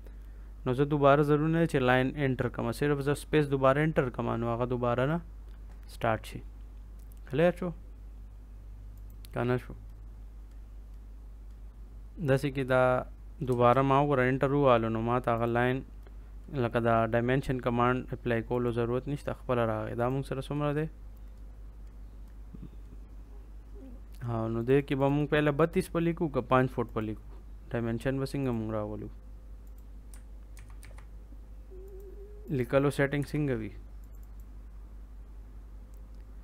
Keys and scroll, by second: 13.4 space, 30.5 ctrl+c, 30.7 ctrl+v, 33.1 Delete.